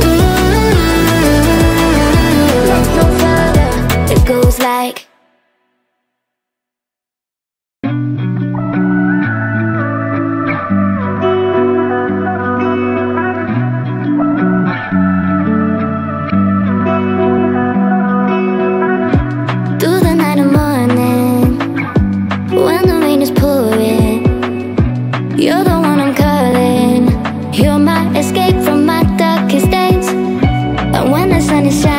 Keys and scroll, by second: 2.3 shift+w, 2.6 e, 4.5 k, 4.8 2.